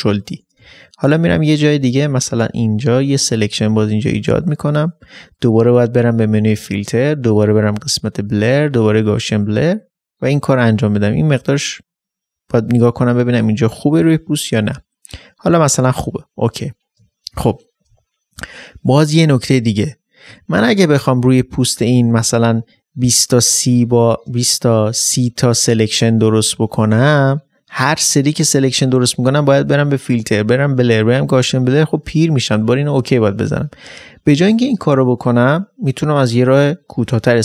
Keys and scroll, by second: 0.1 ctrl+d, 0.6 space.